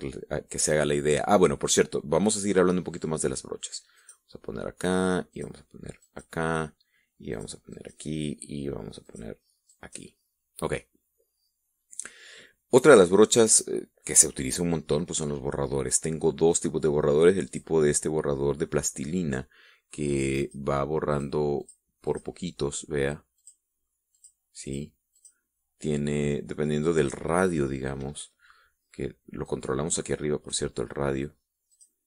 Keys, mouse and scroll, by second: 4.4 click, 5.8 click, 6.5 click, 7.8 click, 8.2 click, 9.5 click, 10.2 click, 18.0 click, 20.9 click, 21.6 click, 22.1 click, 22.6 click, 23.8 click, 24.6 click, 25.1 click, 25.6 click, 30.0-31.2 drag.